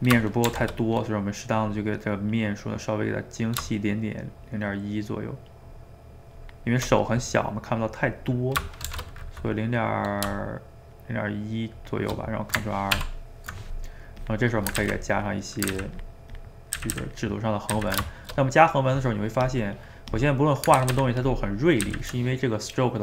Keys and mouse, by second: 0.4 shift+r, 8.8 shift+r, 13.0 ctrl+r, 13.8 middle click, 14.2 click, 14.8 ctrl+z, 15.2 click, 15.7 ctrl+z, 16.0 ctrl+click, 16.8 ctrl+z, 17.0 ctrl+z, 17.2 ctrl+click, 17.7 ctrl+z, 18.1-19.4 shift+middle drag, 19.4-20.8 drag, 20.8 ctrl+z, 21.0 ctrl+z, 21.2 ctrl+click, 21.8 ctrl+z.